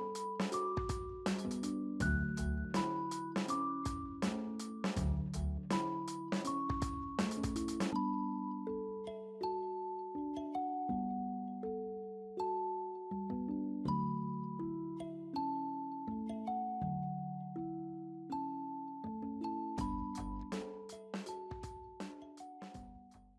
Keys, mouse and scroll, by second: 1.4 right click, 3.4 alt+middle click, 5.6 &, 8.1 middle click, 13.7 alt+middle click, 20.5 alt+middle click.